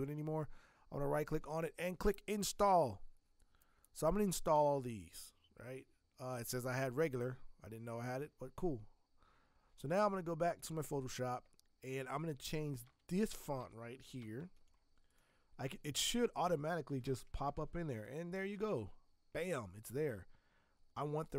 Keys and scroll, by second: 12.8 v, 13.6 Escape, 14.2 v, 16.7-17.9 typing.